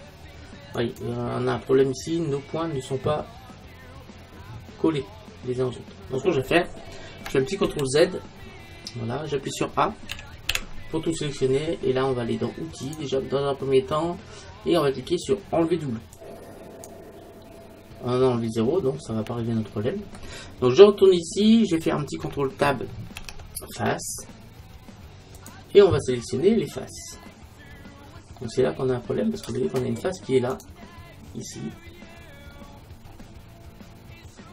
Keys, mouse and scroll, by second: 0.8-2.6 right drag, 1.8-3.6 middle drag, 7.7 ctrl+z, 8.6-10.6 middle drag, 10.2 a, 10.6 a, 12.9-18.7 drag, 18.7-21.3 middle drag, 21.3-22.5 scroll down 1, 22.5 scroll down 1, 23.2 ctrl+Tab, 26.7-29.4 middle drag, 29.5-31.1 middle drag, 30.6-32.3 right drag, 32.6-34.5 scroll up 1.